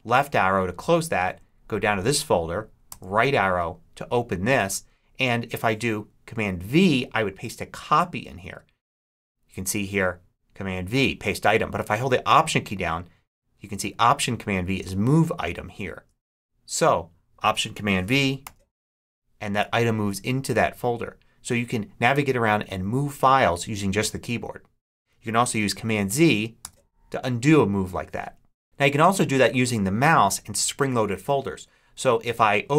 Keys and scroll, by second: 1.1 Down, 2.8 Right, 18.3 alt+super+v, 26.5 super+z.